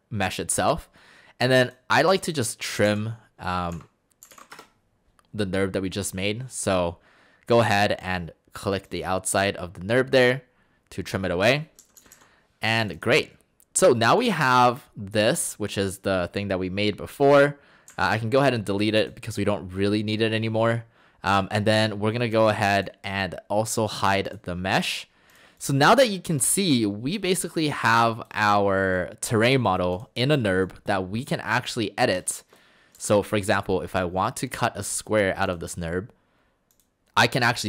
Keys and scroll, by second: 2.9-4.7 typing, 11.8 Escape, 12.0 Escape, 12.1 Escape, 17.9 Delete, 33.0 shift+Escape.